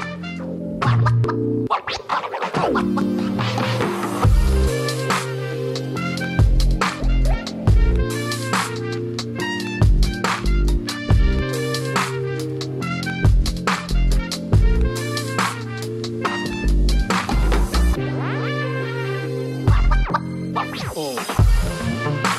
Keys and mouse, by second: 0.4-2.1 drag, 3.5 space, 5.5 click, 5.5 space, 6.1-6.5 drag, 6.7-7.5 drag, 7.7 click, 9.5-9.9 drag, 10.2-11.2 drag, 11.5 click, 11.7 space, 13.9 space, 14.2 shift+middle drag, 14.6 middle click, 14.9 shift+a, 15.9 s, 16.9 middle drag, 17.3 shift+drag, 17.7 click, 17.9 s, 18.0 KP_3, 18.1-18.4 middle drag, 18.4 click, 18.7 middle click, 19.2 shift+middle click, 19.5 click, 21.4 click.